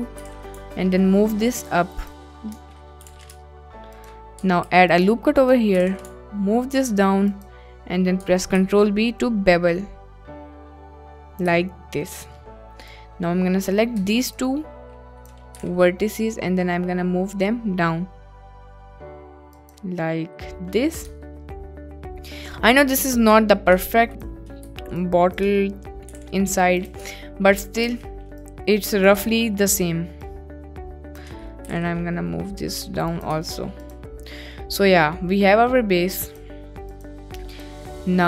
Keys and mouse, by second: 0.3 g, 0.3 z, 0.6-2.1 ctrl+middle drag, 2.0 ctrl+click, 2.5 ctrl+middle click, 3.0 g, 3.3 ctrl+middle click, 4.0 ctrl+click, 4.4 ctrl+middle click, 4.5 ctrl+r, 5.7 g, 5.8 z, 6.0-7.3 ctrl+middle drag, 7.3 ctrl+click, 8.1 ctrl+middle click, 8.5 ctrl+b, 11.3 click, 11.8 shift+click, 13.0 click, 14.4 shift+click, 15.6 g, 19.6 click, 21.1 Tab, 23.7 Tab, 24.1 click, 25.2 shift+click, 26.1 g, 26.2 z, 26.9 click, 27.1 Tab, 28.0 Tab, 28.5 click, 30.2-31.3 shift+drag, 31.7 g, 33.1 z, 33.3 Tab, 33.8 click, 34.7-35.3 middle drag, 36.2 click.